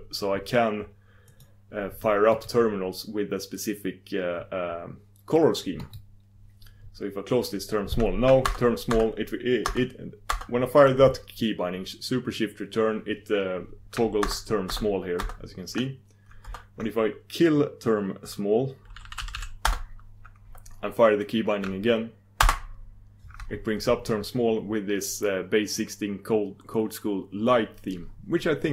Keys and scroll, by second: 5.8 super+d, 8.4 shift+super+Return, 9.2 shift+super+Return, 9.6 shift+super+Return, 10.1 shift+super+Return, 10.4 shift+super+Return, 10.5 shift+super+Return, 14.2 shift+super+Return, 14.8 shift+super+Return, 15.2 shift+super+Return, 15.7 shift+super+Return, 16.6 shift+super+Return, 19.8 shift+super+Return, 22.4 shift+super+Return, 22.5 shift+super+Return.